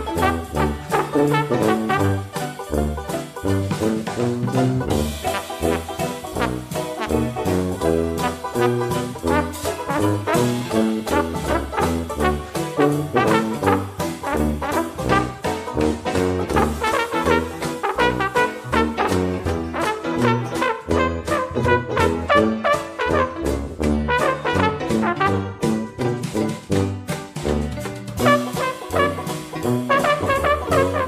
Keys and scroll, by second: 14.8 ctrl+g, 28.8-30.3 typing.